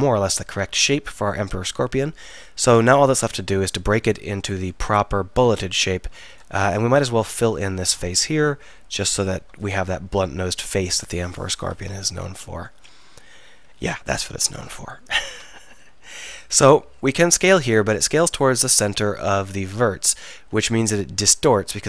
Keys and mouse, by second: 1.1 middle click, 2.7 Tab, 6.4-7.6 drag, 8.0 f, 13.8 KP_1, 14.1 KP_3, 17.2 s.